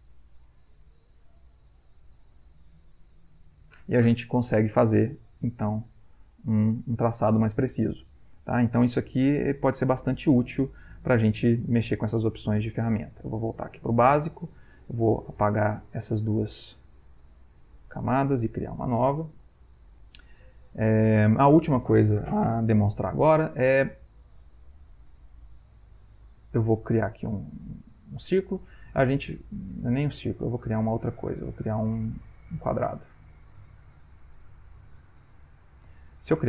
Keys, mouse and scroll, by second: 7.0-11.4 ctrl+middle drag, 7.0-10.5 ctrl+scroll up 1, 10.5-11.4 ctrl+scroll up 1, 17.9-19.9 drag, 19.9 Insert, 30.2 ctrl+z.